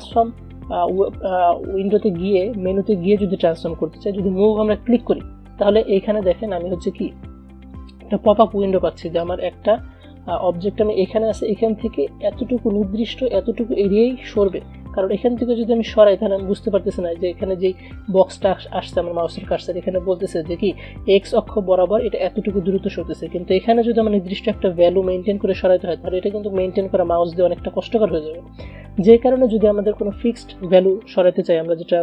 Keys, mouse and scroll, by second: 5.2 click, 9.4-25.6 drag, 30.7-32.0 drag.